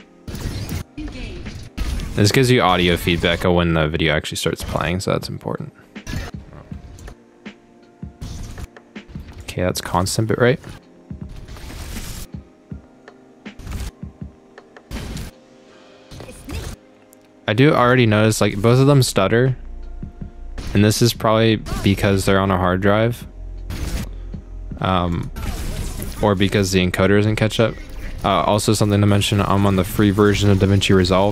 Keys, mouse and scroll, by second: 0.7 click, 1.6 click, 2.4 click, 3.3 click, 4.8 click, 6.2 click, 7.0 click, 8.5 click, 9.4 click, 10.7 click, 12.1 click, 13.8 click, 15.2 click, 16.6 click, 17.8 click, 19.0 click, 20.7 click, 22.2 click, 23.9 click, 25.1 click, 26.5 click, 28.9 click, 31.2 click.